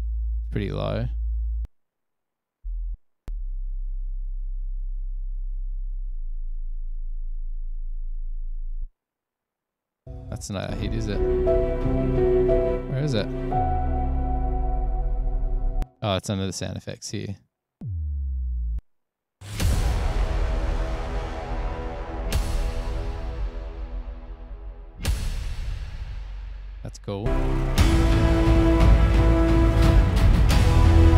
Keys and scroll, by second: 1.7 space, 2.0 space, 10.5 space, 10.7 space, 15.9 space, 17.1 s, 17.3 space, 18.9 space, 19.5 space, 23.4 super+=, 30.7 super+=.